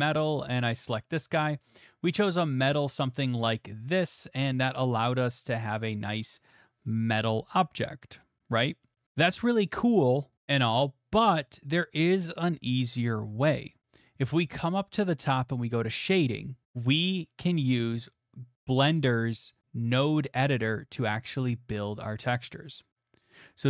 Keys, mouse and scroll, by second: 0.6 click, 0.7 click, 3.0 middle click, 3.5 middle click, 4.0 shift+middle click, 4.2 shift+middle click, 4.5 middle click, 4.8 middle click, 4.8 middle click, 4.9 shift+middle click, 5.6 middle click, 5.6 middle click, 5.6 middle click, 6.9 middle click, 9.0-10.2 middle drag, 13.8-16.0 middle drag, 16.0 click, 17.4 middle click, 19.2 click.